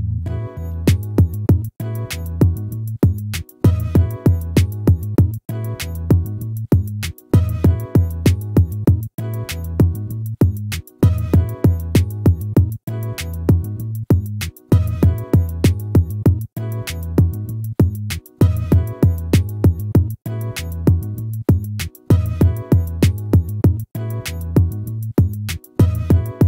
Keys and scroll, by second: 4.3 ctrl+-, 12.2 ctrl+-.